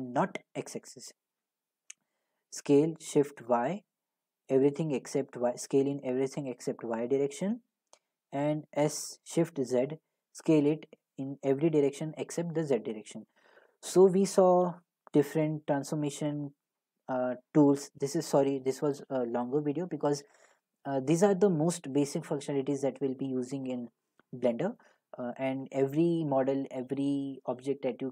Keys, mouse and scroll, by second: 0.7 click, 2.5 s, 2.9-5.8 shift+drag, 3.4 y, 7.5-12.6 drag, 8.7 s, 9.5 z, 13.3 click, 14.7 Delete, 15.6 shift+a, 16.7 click.